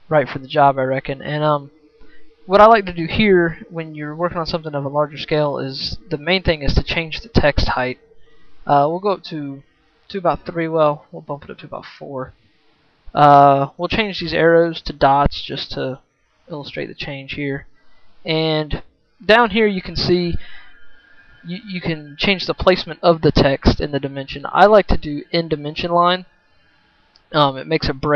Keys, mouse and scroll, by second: 5.3 right click.